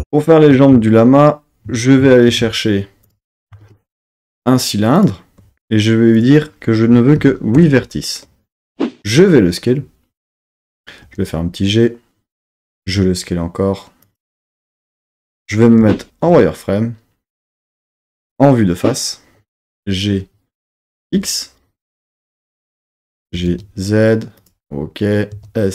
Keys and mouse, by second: 2.3 shift+a, 3.0 click, 3.2 Tab, 3.6 shift+a, 6.1-7.6 drag, 9.0 s, 10.3 click, 11.0 g, 12.2 click, 12.8 s, 14.0 click, 15.8 z, 18.1 KP_1, 19.7 g, 21.0 x, 22.6 click, 23.2 g, 23.5 z, 24.4 click, 25.3 s.